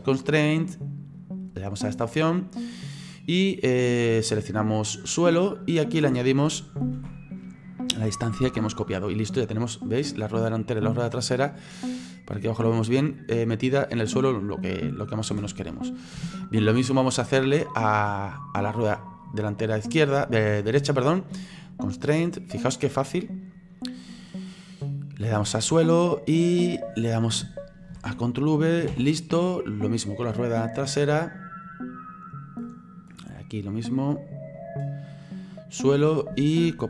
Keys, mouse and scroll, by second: 0.3-9.4 drag, 9.4-10.5 middle drag, 10.5 scroll up 2, 10.9 scroll down 2, 12.0-15.9 middle drag, 15.9-16.3 scroll up 3, 16.3-17.5 shift+middle drag, 17.5 scroll down 1, 17.6-18.8 scroll up 2, 18.8 right click, 22.1-29.9 drag, 29.9 right click, 31.3-36.8 drag.